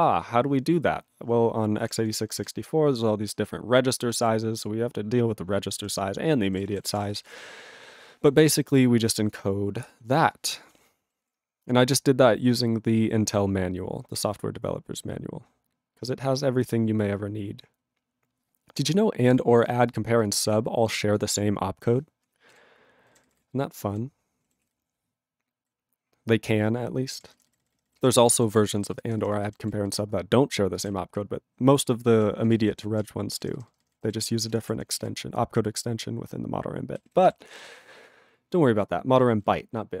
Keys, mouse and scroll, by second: 2.4 ctrl+space, 2.4-4.1 ctrl+n, 4.2 ctrl+g, 4.3-5.8 ctrl+p, 5.8 ctrl+e, 6.5 ctrl+n, 6.6 ctrl+space, 6.7 ctrl+e, 6.7 ctrl+n, 6.8 ctrl+n, 6.9 ctrl+e, 7.0 ctrl+g, 7.0 ctrl+n, 7.1 ctrl+n, 7.2 ctrl+n, 8.6-9.1 scroll down 1, 9.1 click, 9.3 click, 9.9 scroll down 4, 10.3 click, 10.6 click, 10.7 click, 11.2 ctrl+s, 11.6-12.3 scroll down 14, 12.6-16.8 scroll, 17.0 scroll, 18.8 click, 18.9 click, 19.2 click, 19.3 click, 19.6 click, 19.6 click, 20.2 click, 20.2 click, 20.7 click, 20.9 click, 21.0 scroll, 21.2 click, 22.5 ctrl+g, 23.1 ctrl+n, 23.2 ctrl+n, 23.3 ctrl+a, 23.4 ctrl+n, 23.9 ctrl+n, 24.6 ctrl+s, 24.7-25.6 ctrl+n, 25.7-27.2 ctrl+p, 27.2 ctrl+space, 27.3 ctrl+n, 27.4 ctrl+n, 27.6 ctrl+n, 27.7 ctrl+n, 27.8 ctrl+n, 28.0 ctrl+g, 28.2 ctrl+p, 28.4 ctrl+p, 28.6 ctrl+p, 28.7 ctrl+p, 28.8 ctrl+space, 28.9 ctrl+n, 29.0 ctrl+n, 29.2 ctrl+n, 29.3 ctrl+n, 29.4 ctrl+n, 29.6 ctrl+g, 29.7-30.8 ctrl+n, 30.9-31.8 ctrl+p, 31.8 ctrl+e, 32.2 ctrl+p, 32.4 ctrl+space, 32.4 ctrl+a, 32.5 ctrl+p, 32.6 ctrl+p, 32.9 ctrl+p, 33.0 ctrl+g, 33.3 ctrl+space, 33.4 ctrl+n, 33.5 ctrl+n, 33.7 ctrl+n, 33.8 ctrl+n, 33.9 ctrl+n, 34.0 ctrl+g, 34.1 ctrl+p, 34.2 ctrl+e, 34.4 ctrl+space, 34.4 ctrl+a, 34.5 ctrl+p, 34.6 ctrl+p, 34.9 ctrl+p, 35.0 ctrl+g, 35.0-36.9 ctrl+n, 37.6 ctrl+g, 39.4-40.0 ctrl+n.